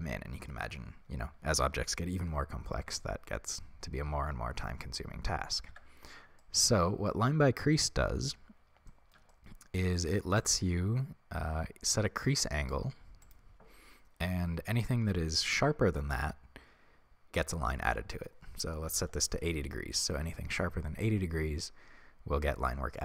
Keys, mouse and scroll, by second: 5.8 Tab, 7.4 scroll up 1, 10.5-23.0 drag.